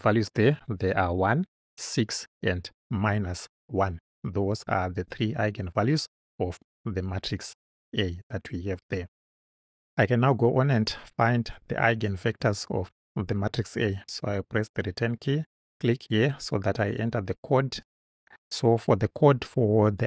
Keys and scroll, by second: 14.4 Return.